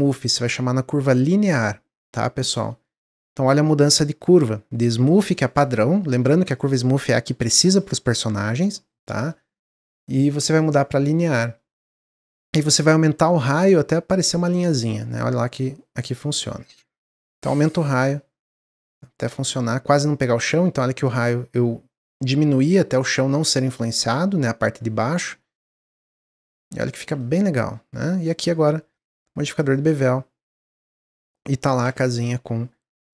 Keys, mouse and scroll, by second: 11.5 s, 26.2 middle click, 26.9 Tab, 27.1-28.9 middle drag, 29.6-31.0 drag, 31.0 Tab, 31.3 middle click, 31.6 scroll down 2, 31.8 click, 32.2-33.1 middle drag.